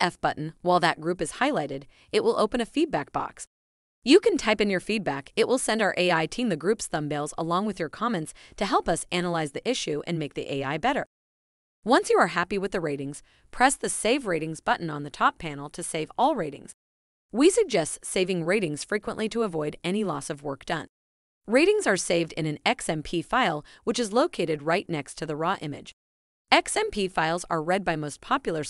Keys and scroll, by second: 0.9 f, 4.9-8.5 typing.